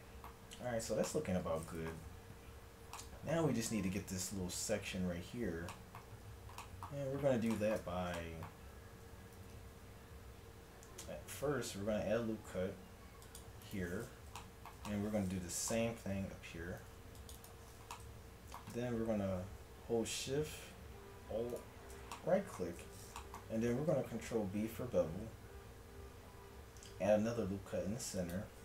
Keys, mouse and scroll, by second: 0.5 Tab, 8.7 a, 9.3 ctrl+r, 11.8-12.8 scroll up 1, 16.9 ctrl+r, 21.5 click, 22.1-23.8 middle drag, 23.8 ctrl+b.